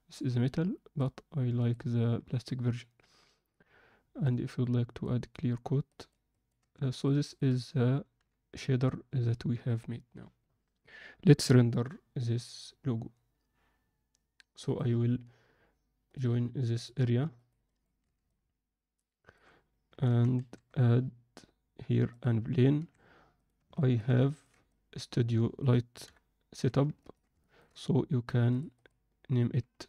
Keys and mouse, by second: 4.6 click, 6.0 ctrl+alt+middle click, 14.8-16.8 right drag, 17.3 ctrl+middle drag, 17.6 ctrl+middle click, 18.2-19.3 ctrl+alt+middle drag, 20.0 shift+c, 20.3 shift+a, 22.7 s, 23.7 ctrl+middle click, 24.2 ctrl+middle click, 24.6-25.6 middle drag, 26.0 KP_1, 26.5 z, 27.0 ctrl+alt+middle click, 27.4 alt+shift+middle click, 28.8 click.